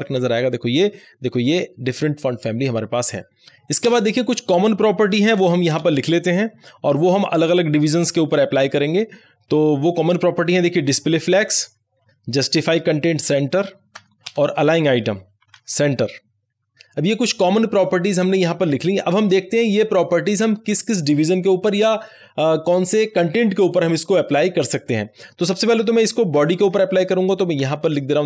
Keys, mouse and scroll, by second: 0.0 ctrl+s, 3.4 BackSpace, 3.8 Return, 5.4 shift+[, 5.6 Return, 10.3-17.1 typing, 25.6 Up, 26.6 Left, 27.5 Up, 27.8 Left.